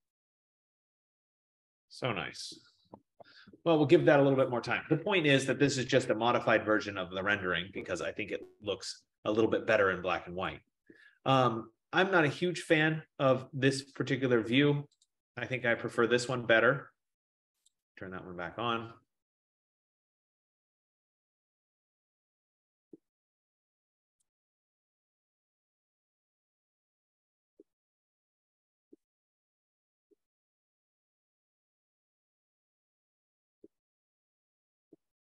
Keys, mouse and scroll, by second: 0.2 click, 0.8 click, 3.2 ctrl+0, 10.9 click, 15.1 click, 15.9 click, 24.4 click, 24.5 F15.